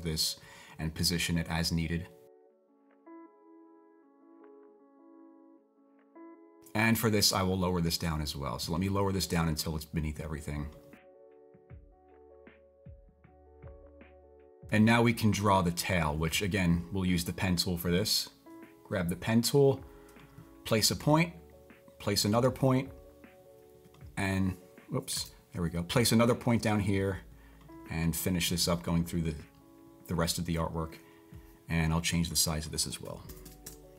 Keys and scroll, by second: 25.1 super+z, 33.0-33.9 typing.